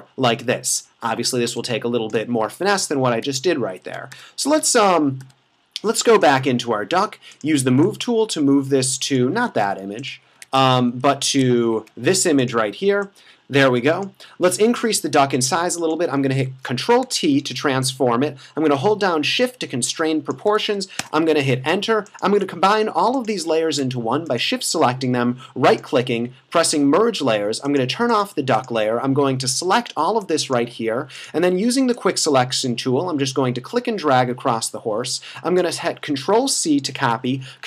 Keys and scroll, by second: 1.5 space, 3.2 super+`, 4.2 f, 9.5 super+z, 10.6 super+`, 11.3 super+`, 16.5 super+t, 21.0 Return, 36.4 super+c, 37.1 super+v.